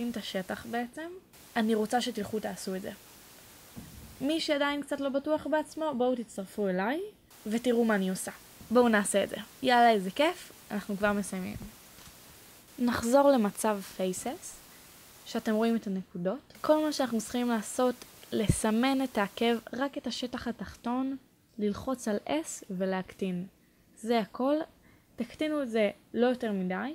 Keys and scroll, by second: 11.0 1, 24.1 s.